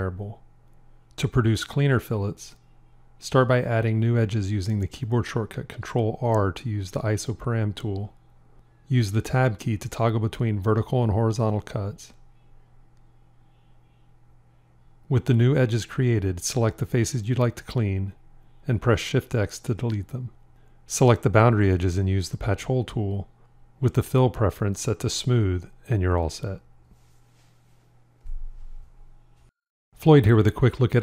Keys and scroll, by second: 5.0 ctrl+r, 6.2 Tab, 19.8 shift+x.